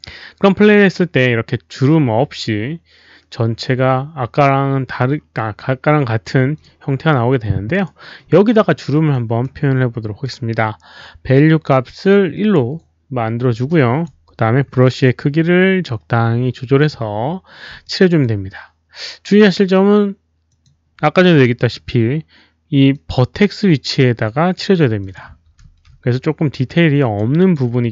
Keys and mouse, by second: 0.6 alt+click, 1.4 Return, 1.4 alt+click, 1.4 KP_0, 3.8 Return, 3.8 alt+click, 3.8 KP_0, 4.8 KP_0, 5.0 alt+click, 6.5 alt+click, 7.7 alt+click, 8.3 alt+middle click, 9.1 alt+click, 9.4 alt+middle click, 12.1 alt+click, 13.6 alt+click, 14.7 b, 14.8-16.7 alt+drag, 16.7 alt+middle click, 16.7 b, 17.8 alt+click, 18.2 alt+b, 18.2 alt+middle click, 20.4 alt+click, 20.4 b, 21.2 alt+click, 21.3 alt+b, 21.4 alt+right click, 22.9-24.5 alt+drag, 24.9 alt+click, 26.9 alt+right click, 27.3 alt+click.